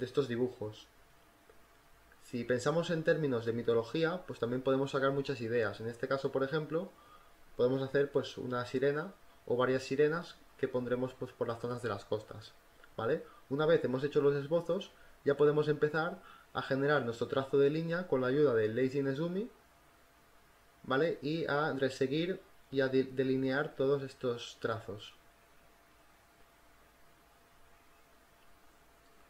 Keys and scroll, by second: 0.8-2.6 typing, 7.1 ctrl+t, 7.5 Return, 7.7 v, 8.1 ctrl+alt+z, 8.6 b, 9.1 e, 9.6 ctrl+t, 9.9 Return, 10.0 ctrl+t, 10.3 Return, 10.7-13.2 typing, 13.6 ctrl+z, 16.1 e, 16.4 b, 21.6-24.4 typing, 27.7 space.